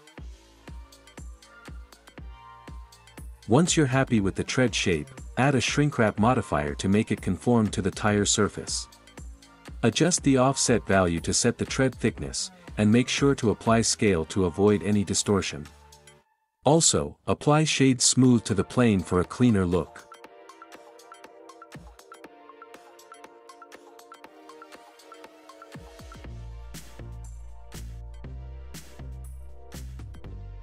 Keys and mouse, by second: 0.3 click, 3.1-4.9 drag, 17.8 ctrl+a, 22.2-22.8 middle drag, 23.2-24.1 right drag, 26.5 right click, 26.5-30.2 middle drag.